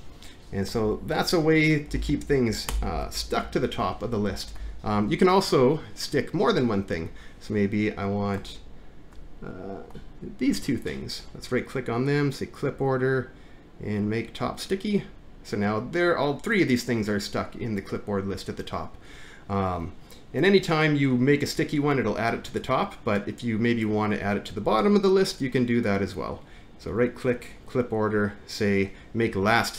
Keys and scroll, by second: 0.9 Home, 1.9 Up, 2.0 Up, 2.7 BackSpace, 4.6 alt+`.